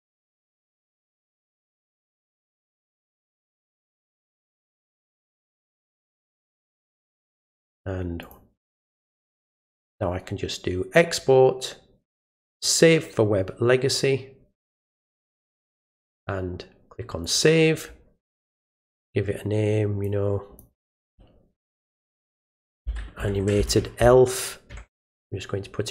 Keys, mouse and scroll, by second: 0.8 click, 1.6 click, 1.9 right click, 2.7 click, 3.4 click, 3.8 right click, 4.5 click, 5.3 click, 5.6 right click, 6.4 click, 7.1 click, 7.4 right click, 8.2 click, 9.8 click, 12.5 click, 17.2 click, 20.0 click.